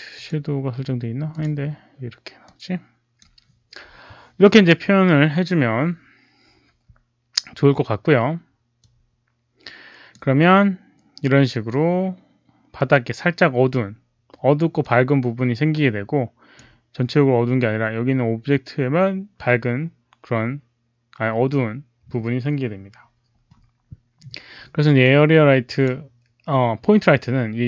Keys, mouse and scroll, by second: 0.1 click, 1.2 click, 1.3 alt+middle click, 2.4 click, 8.7-10.0 drag, 10.9 click, 14.7 click, 16.5 click, 24.9 click.